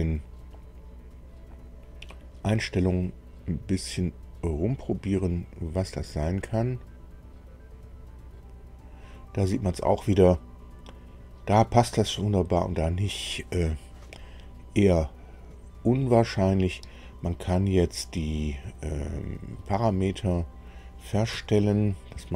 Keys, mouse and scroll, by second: 21.2 Escape.